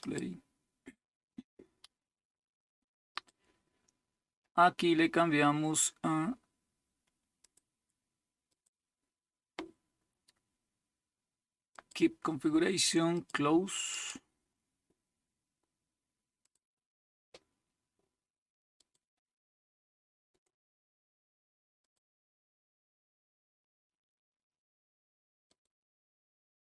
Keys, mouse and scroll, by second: 0.0 click, 3.1 click, 4.7-7.5 scroll down 3, 7.5 click, 8.5 click, 11.7 click, 13.1-15.0 drag, 16.4 click, 16.7 click, 18.8 click, 20.4 right click, 21.8 click, 25.5 click.